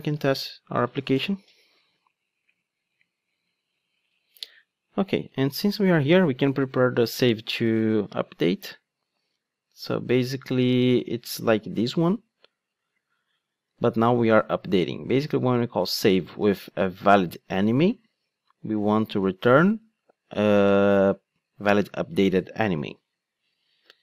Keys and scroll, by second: 0.1 ctrl+d, 11.8 super+c, 13.9 super+v.